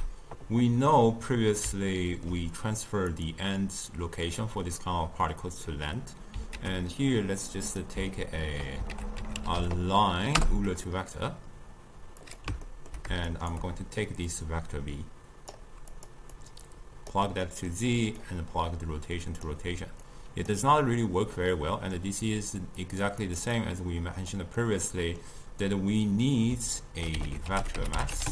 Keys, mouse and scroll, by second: 0.9-3.2 middle drag, 3.2 click, 3.5-6.5 drag, 6.6 ctrl+a, 8.1 ctrl+middle click, 9.0 ctrl+a, 12.7-13.4 ctrl+middle drag, 13.4 shift+right click, 14.3-16.1 drag, 16.4 click, 17.3-18.3 middle drag, 18.3-21.4 drag, 21.4-22.9 middle drag, 22.9 click, 23.3 click, 23.6-24.6 drag, 24.6-27.3 middle drag, 27.3 ctrl+a.